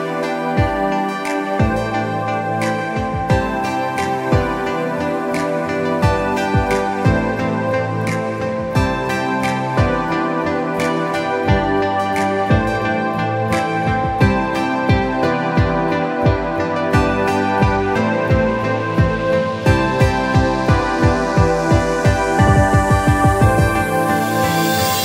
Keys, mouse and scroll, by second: 2.8 alt+click, 3.4 alt+space, 3.5 alt+scroll up 2, 3.7 click, 4.4 scroll down 1, 4.5 space, 4.6 scroll up 1, 4.8 click, 6.5 space, 6.9 click, 7.4 click, 9.0 click, 9.9 click, 10.0 scroll down 1, 10.2 scroll up 1, 10.3 space, 10.5 click, 11.2 click, 11.7-12.3 alt+scroll down 2, 11.8 click, 11.9 space, 12.3 space, 13.0-13.3 scroll down 2, 13.4 space, 13.6 scroll up 1, 13.8 click, 14.5 click, 16.7 click, 17.8 scroll down 1, 17.9 space, 18.7 click, 18.8 space, 18.9 click, 19.1 scroll down 1, 19.2 scroll, 19.3-19.6 scroll up 3, 19.9 click, 20.2 click, 21.6 space, 21.8 click, 22.1 click, 22.7 click, 23.6 click, 24.4 click, 24.8 space.